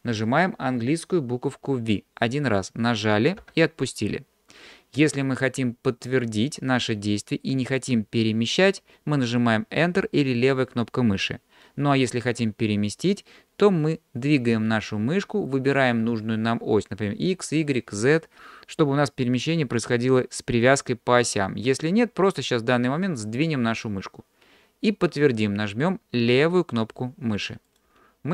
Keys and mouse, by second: 3.4 v.